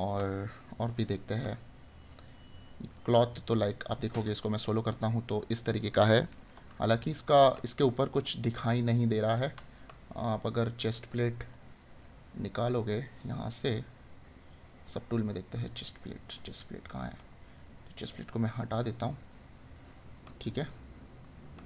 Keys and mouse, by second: 1.2 right click, 5.1 right click, 6.8 right click, 19.2 right click.